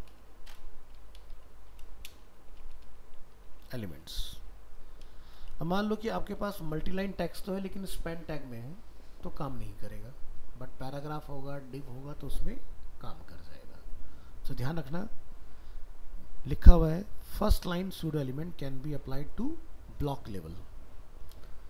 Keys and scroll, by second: 6.5 ctrl+s.